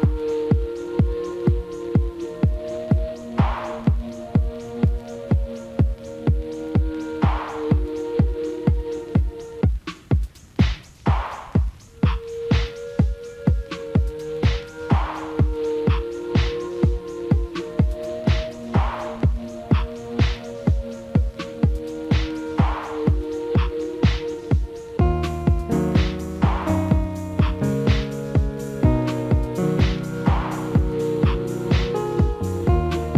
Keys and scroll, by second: 9.6 F4, 27.1 F4, 28.5 alt+w.